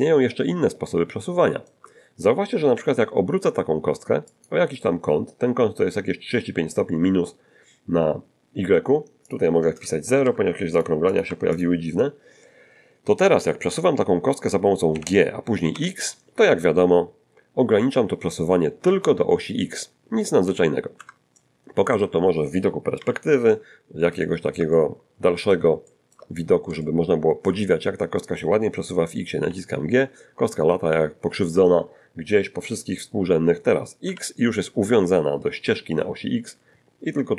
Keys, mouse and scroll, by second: 0.5-1.9 shift+middle drag, 2.7 r, 4.3 click, 9.3 click, 10.2 0, 10.7 click, 11.1 click, 11.3 0, 11.5 click, 14.9 g, 15.7 x, 21.0 Escape, 21.3 middle click, 23.0 5, 23.4-24.1 scroll down 2, 24.2-25.7 shift+middle drag, 25.8-28.4 shift+middle drag, 26.3 shift+scroll up 1, 29.5 g, 34.1 x.